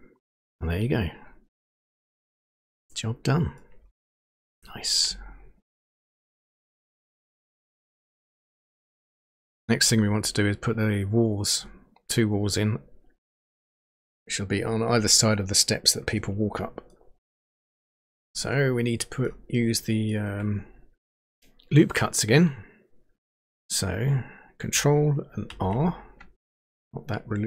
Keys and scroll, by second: 25.5 ctrl+r.